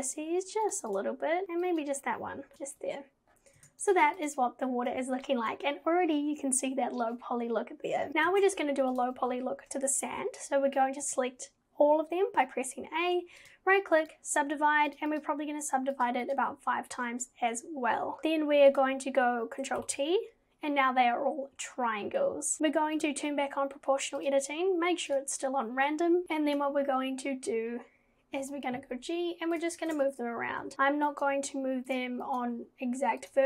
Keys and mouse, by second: 0.9 click, 1.8 click, 2.5 click, 2.5 g, 3.6 Tab, 8.3 Tab, 11.1 a, 14.1-15.2 right drag, 15.2 click, 16.0 click, 18.2 Tab, 19.8 ctrl+t, 23.0 click, 24.4-25.5 drag, 26.5 click, 28.5 g, 29.9 ctrl+z, 30.6 g, 31.2 click, 31.4 g, 32.5 g.